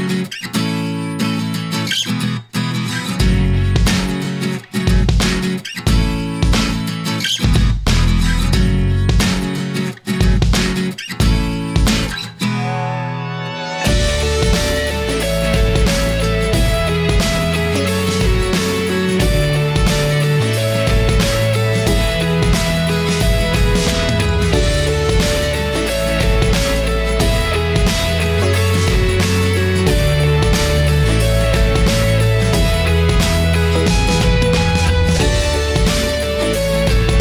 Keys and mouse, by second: 1.1-2.7 shift+drag, 3.8-5.0 shift+drag, 6.0-7.0 shift+drag, 7.8-8.9 shift+drag, 9.5-10.9 shift+drag, 11.8 shift+middle click, 12.5-14.2 shift+drag, 15.5-16.6 shift+drag, 18.1-19.2 drag, 20.1 e, 23.8 shift+middle click, 25.3 Tab, 26.3 Tab, 26.7 middle click, 28.7 click, 31.0 click, 32.0 middle click, 32.8 e, 35.1 e, 37.0 e.